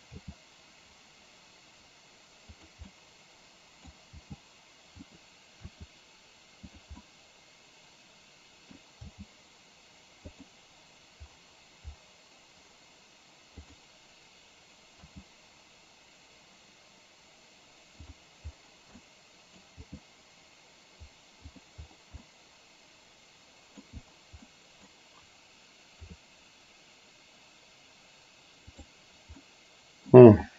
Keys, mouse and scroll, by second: 0.2 g, 2.9-3.9 middle drag, 4.2 g, 5.7 r, 7.1-8.8 middle drag, 9.2 g, 13.7 click, 16.6 g, 19.1 middle click, 19.9 g, 22.3 scroll up 1, 22.4-23.9 middle drag, 24.6-24.9 middle drag, 26.2 r, 29.4-30.3 middle drag.